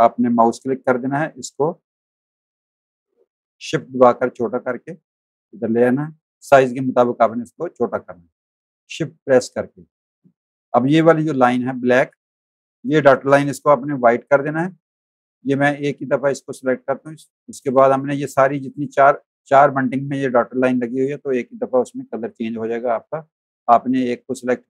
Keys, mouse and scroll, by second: 0.3 v, 2.4 shift+click, 6.3 click, 7.7 alt+shift+click, 9.8 click, 11.1-13.4 typing, 11.5 click, 12.2 click, 12.7 click, 13.8 click, 14.9 click, 15.8 click, 16.7 click, 24.2 click.